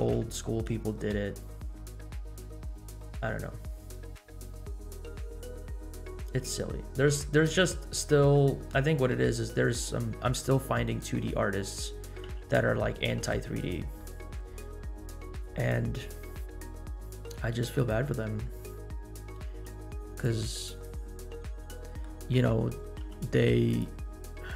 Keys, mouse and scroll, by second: 0.0 space, 2.4 space, 8.2 space, 9.5 scroll up 2, 10.7-11.2 scroll up 5, 11.4-11.8 drag, 12.4 g, 14.0 middle click, 14.9-15.2 scroll up 1, 15.3 click, 15.9 scroll up 1, 16.7 scroll up 1, 16.8 g, 18.1-19.3 scroll up 3, 19.6 g, 20.5-20.9 drag, 21.1-21.6 scroll up 1, 21.6 middle click, 21.6 scroll up 1, 22.9 g, 24.0 scroll down 2.